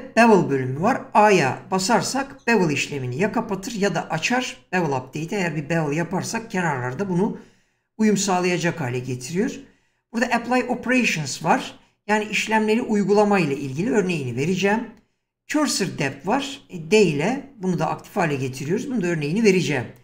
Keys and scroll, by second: 2.5 a.